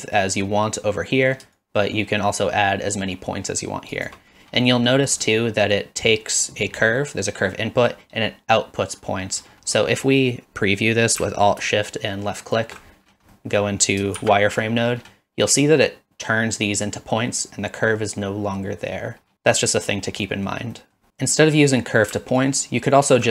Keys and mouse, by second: 1.6-4.1 shift+drag, 4.7 middle click, 5.3 middle click, 12.5 alt+shift+click, 13.3 middle click, 14.2 shift+z, 20.4 middle click, 20.9 middle click, 22.4 alt+click.